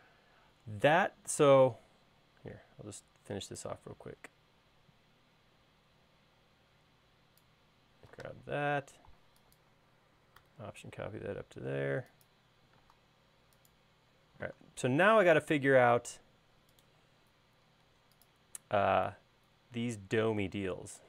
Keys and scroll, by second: 8.8 m, 13.5 space.